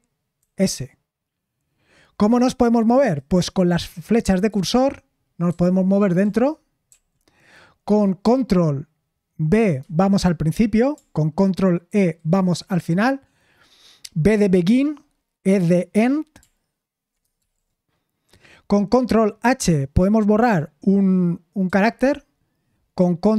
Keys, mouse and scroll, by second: 6.8 Right, 9.8 ctrl+b, 11.8 ctrl+e, 17.4 super+l, 21.6 ctrl+h.